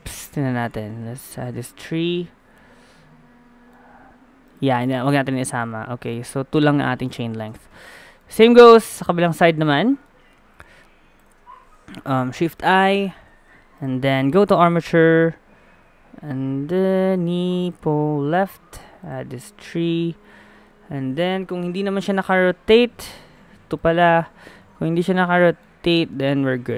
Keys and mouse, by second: 0.0-1.2 drag, 1.2 middle click, 2.0-3.1 drag, 3.1-6.3 middle drag, 5.7 a, 6.1 a, 6.6 alt+g, 6.8 alt+r, 6.8 alt+s, 7.2-10.3 middle drag, 7.5 a, 12.2 shift+i, 21.5 KP_1, 24.9 a, 25.4-26.7 middle drag.